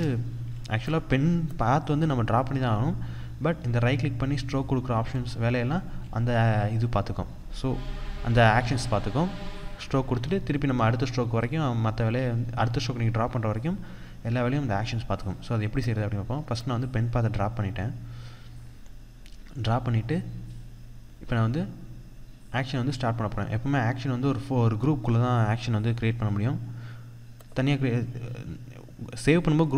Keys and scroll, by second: 0.2 Escape, 11.7 Escape.